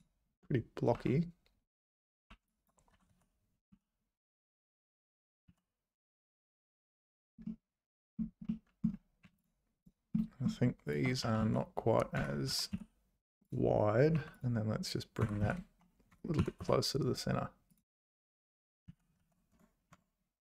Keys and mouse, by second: 1.0 `, 2.3 1, 2.5 click, 2.9 s, 5.4 z, 7.6 middle click, 8.5 middle click, 9.2 3, 10.1 middle click, 10.8 shift+click, 11.2 s, 12.5 s, 14.1 3, 15.2 g, 16.4 g, 17.8 `, 18.9 ctrl+z, 19.5 Tab.